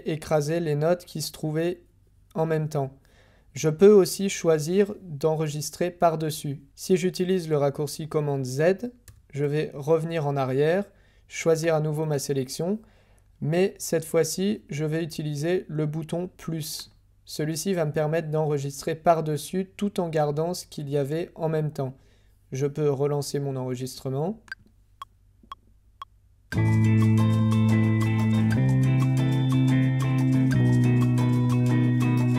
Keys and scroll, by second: 9.0 super+z, 26.5 h, 28.5 k, 30.5 j.